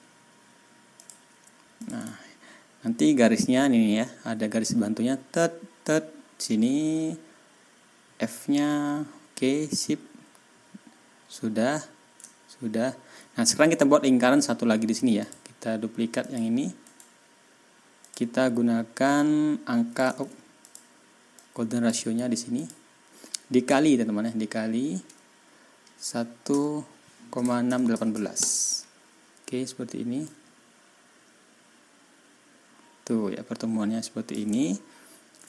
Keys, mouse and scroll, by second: 0.9 click, 1.7 ctrl+click, 2.0-2.7 ctrl+scroll down 4, 12.3 ctrl+scroll down 2, 12.7 ctrl+scroll up 2, 15.1 click, 16.1 click, 16.8 right click, 18.0 click, 19.1 click, 20.2 ctrl+y, 20.6 ctrl+click, 21.3 click, 22.5 click, 26.4 KP_1, 27.6 KP_6, 27.8 KP_1, 28.0 KP_8, 28.3 Return, 30.2-34.4 drag, 34.5 ctrl+scroll down 2, 34.9 ctrl+scroll up 2.